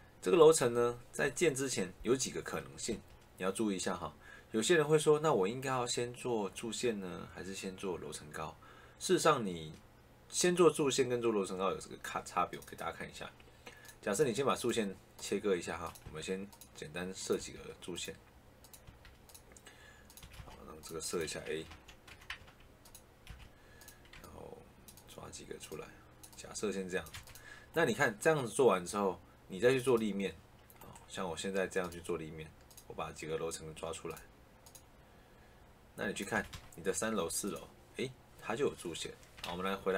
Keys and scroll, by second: 2.8 Escape, 15.9 Escape, 17.3 Escape, 18.8 Escape, 20.1 Escape, 21.6 a, 22.3 Caps_Lock, 22.4 a, 23.2 Escape, 27.0 Escape, 36.3 Escape, 39.4 ctrl+z.